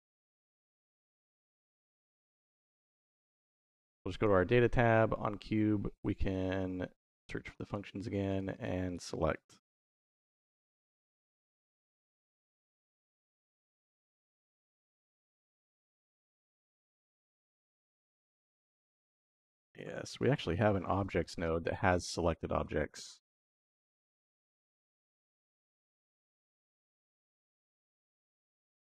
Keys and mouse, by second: 0.5 click, 4.0 click, 6.2-10.5 drag, 12.7 click, 13.5 click, 16.2 shift+v, 17.4 click, 18.5 middle click, 18.7 click, 19.2 shift+a, 21.1 shift+a.